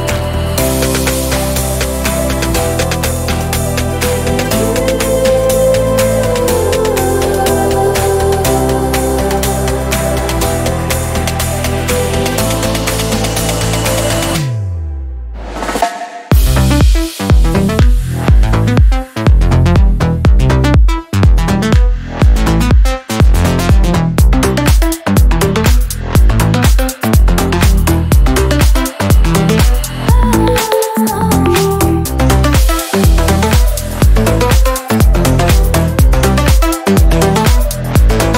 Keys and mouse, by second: 2.2 drag, 5.7-9.9 drag, 10.9 x, 12.5 click, 16.7 click, 17.4 click, 18.0 click, 20.0 click, 20.6 click, 21.3 click, 22.2 click, 23.8 click, 26.2 click, 28.3-33.1 drag, 33.1-36.7 middle drag, 36.7 click, 37.4-38.3 middle drag.